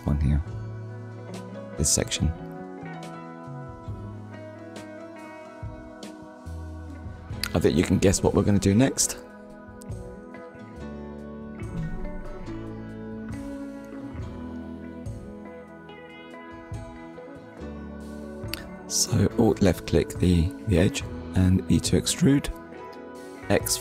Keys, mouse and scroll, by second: 0.6 click, 4.0 click, 4.5 middle click, 8.2 KP_1, 8.9 scroll down 1, 12.0 click, 12.6 click, 13.2 shift+middle click, 14.9 KP_1, 15.6 scroll up 1, 16.9-17.3 scroll up 1, 18.0 alt+click.